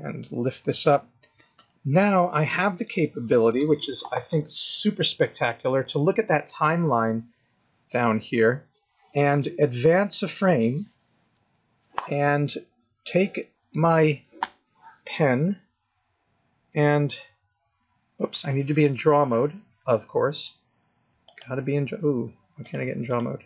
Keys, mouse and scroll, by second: 1.0 scroll up 1, 10.3 Right, 16.6 click, 17.2 click, 21.2 click, 22.6 click, 23.0 click.